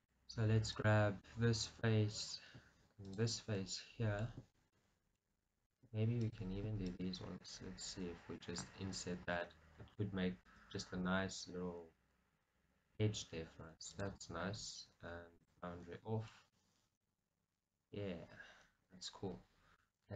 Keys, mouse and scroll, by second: 0.0-1.2 drag, 1.2-3.2 middle drag, 3.2 shift+click, 3.7-6.9 middle drag, 6.3 shift+click, 6.9 click, 7.4-14.2 middle drag, 8.7 scroll up 2, 14.2 click, 15.5 click, 16.4 shift+middle click, 17.1 middle click.